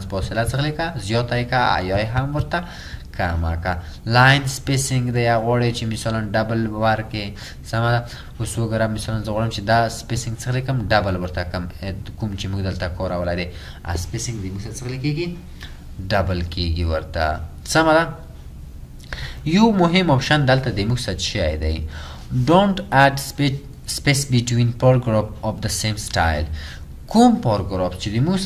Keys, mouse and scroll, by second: 0.6 double click.